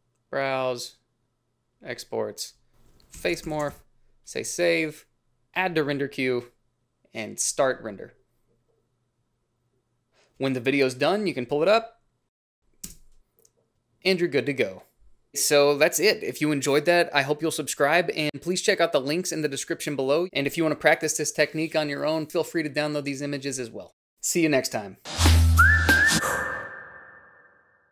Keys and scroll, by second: 3.2-4.5 typing, 12.7 space.